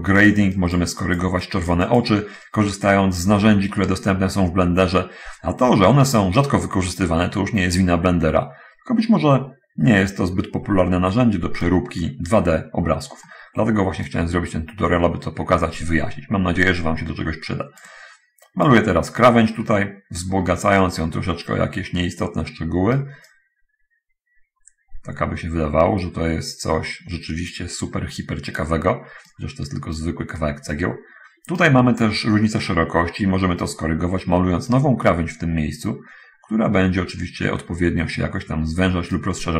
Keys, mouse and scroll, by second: 0.9 click, 1.3 click, 2.7-12.1 right drag, 12.3-12.9 scroll up 1, 12.9 scroll up 1, 13.1 scroll down 1, 13.2 scroll up 1, 13.4 scroll down 1, 13.5 middle click, 14.4-19.1 drag, 19.6-20.6 middle drag, 21.1 right click, 23.6-28.7 drag, 29.6 right click, 30.7-31.9 right drag, 32.5 scroll up 1, 33.1-33.9 scroll up 1, 34.1 middle click, 34.5-39.3 right drag.